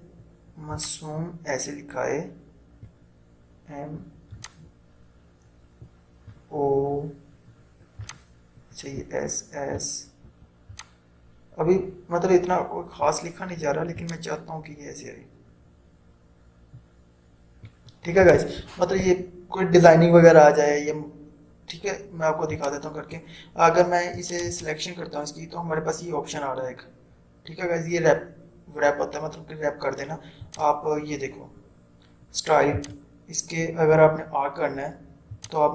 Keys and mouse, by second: 0.9-18.4 drag, 22.7-24.6 drag, 27.1 typing, 30.5 click, 30.5 typing, 32.8 click, 35.3 typing, 35.4-35.7 drag.